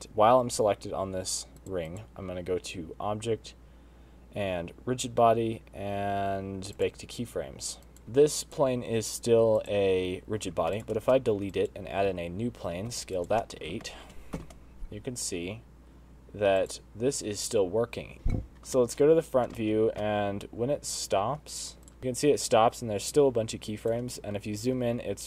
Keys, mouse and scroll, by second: 0.1 click, 2.2 click, 2.5 click, 8.0 click, 8.1 click, 9.2 click, 10.4 click, 11.3 x, 11.6 shift+a, 12.7 s, 14.0 middle click, 14.3 space, 15.0 shift+Left, 17.2 click, 18.1 space, 18.4 KP_1, 18.9-19.3 scroll up 4, 19.4 shift+middle click, 20.2 space, 21.5 space, 22.0 click, 22.0 space, 22.5 shift+right click, 22.5 space, 24.8-25.2 scroll up 12.